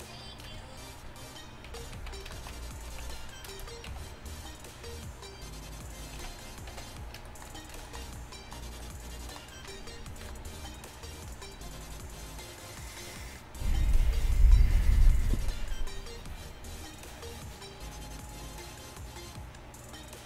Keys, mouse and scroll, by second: 1.7 a, 2.1 z, 3.1 z, 3.9 g, 6.2 z, 6.8 a, 10.3 KP_5.